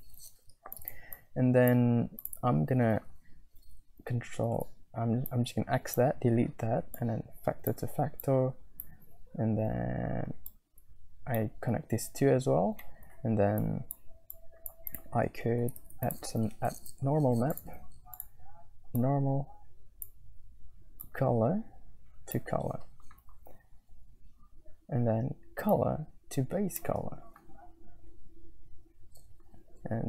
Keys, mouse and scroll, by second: 0.7 click, 1.1 click, 2.2 click, 4.5 ctrl+x, 5.4 click, 7.0 click, 8.3 click, 10.9 alt+click, 12.8 middle click, 13.7 click, 14.3 middle click, 14.4 click, 15.5 click, 15.6 middle click, 15.8 shift+a, 19.0 click, 20.1 middle click, 21.1-22.5 drag, 25.6-26.9 drag.